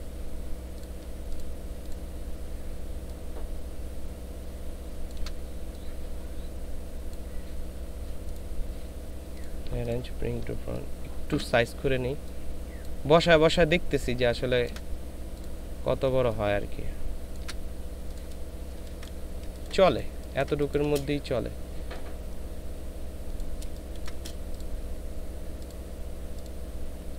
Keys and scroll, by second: 18.8 ctrl+space, 19.4 ctrl+space, 20.1 ctrl+space, 23.7 ctrl+space.